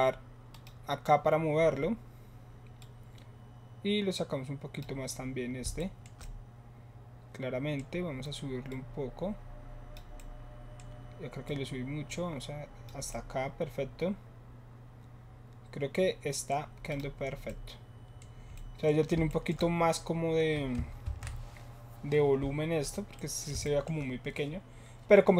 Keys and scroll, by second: 21.0 ctrl+s.